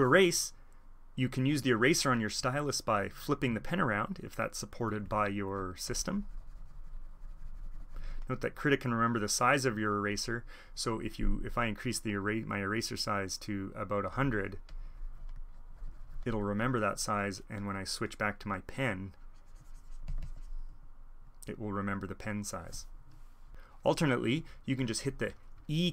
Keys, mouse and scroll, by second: 5.8-9.6 drag, 9.9-12.1 drag, 19.1-20.7 drag.